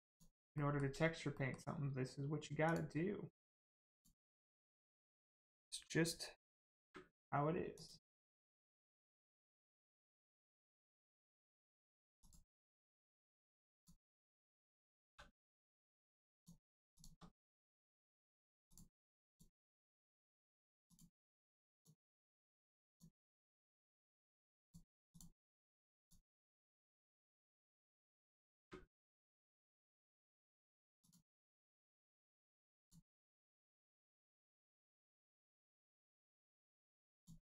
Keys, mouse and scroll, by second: 0.0 shift+click, 0.5 shift+middle click, 1.3 middle click, 1.4 middle click, 2.6 shift+click, 3.8 shift+click, 4.5 ctrl+click, 6.7 space, 7.7 click, 8.2 right click, 10.6 click, 11.3 middle click, 12.1 click, 12.7 middle click, 13.7 click, 15.0 3, 15.4 middle click, 16.3 click, 16.9 shift+click, 17.3 middle click, 18.6 shift+click, 19.2 shift+click, 19.8 shift+middle click, 20.8 shift+click, 21.7 shift+click, 22.8 shift+click, 23.5 shift+middle click, 24.6 shift+click, 25.1 shift+click, 25.9 shift+click, 26.3 shift+middle click, 27.1 middle click, 28.5 space, 29.4 click, 29.9 right click, 31.0 click, 31.4 middle click, 32.7 click, 33.3 middle click, 34.9 scroll up 1, 35.7 middle click, 37.1 click.